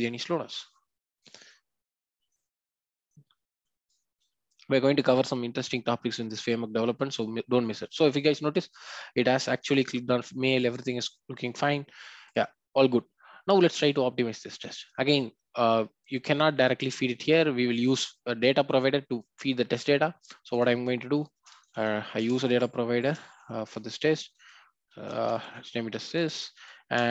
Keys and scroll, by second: 22.1 Return, 26.2 alt+Return.